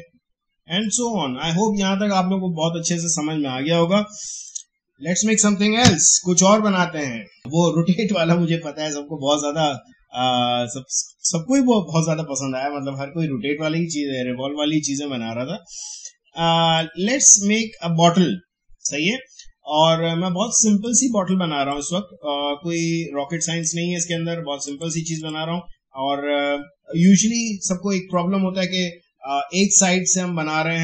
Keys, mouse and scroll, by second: 0.8 click, 3.8 click, 5.8 Delete, 11.1 click, 16.7-24.6 drag.